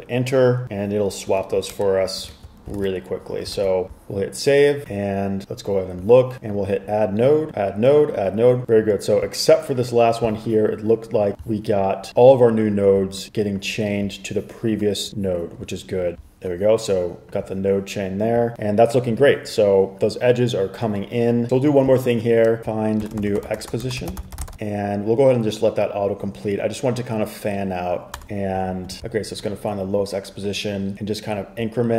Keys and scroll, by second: 0.0-0.3 typing, 1.9 super+Return, 2.4 super+s, 2.9 super+Tab, 3.7 super+r, 21.5 Escape, 22.6-25.0 typing, 28.0-28.7 typing, 28.8 super+s.